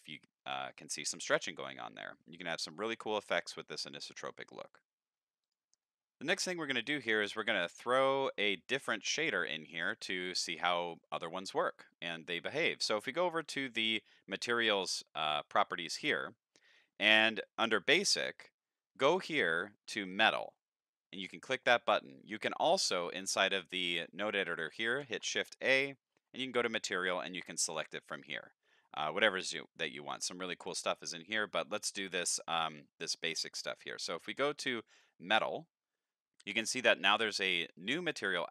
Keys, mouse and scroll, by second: 3.1 middle click, 4.1 middle click, 5.4 click, 5.8 middle click, 6.4 middle click, 7.2-7.7 scroll down 6, 7.7 middle click, 10.7 middle click, 13.2 click, 22.2 middle click, 22.9 click, 23.9 middle click, 25.0 shift+a, 35.0 click, 36.4 click, 37.6 click.